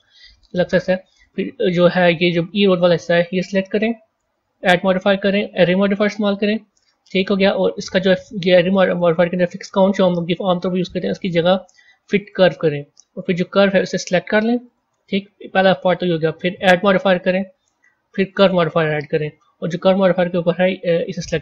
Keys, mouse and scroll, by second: 1.1 click, 4.4-7.4 drag, 10.7-13.7 drag, 15.8 click, 16.4-19.6 drag, 19.7 click.